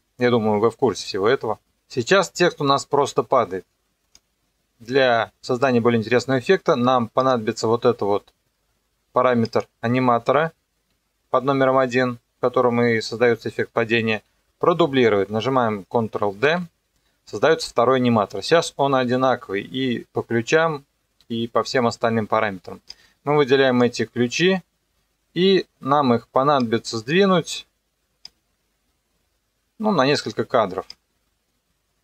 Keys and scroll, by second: 16.4 ctrl+d, 19.0 u.